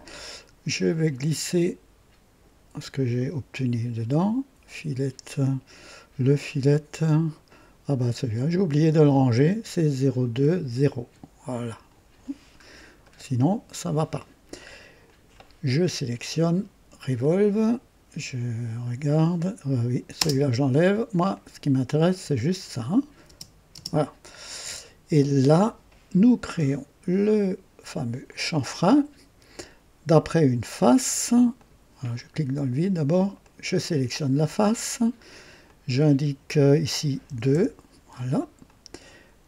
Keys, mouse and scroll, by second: 1.6 click, 7.4-11.3 drag, 12.5 scroll up 1, 13.0 right click, 15.0 click, 17.2 click, 20.1 space, 21.3 click, 23.4 space, 28.2 click, 31.5 click, 32.1 click, 33.4 click, 35.6 click, 37.2 KP_2, 37.6 KP_Enter, 38.6-39.4 drag.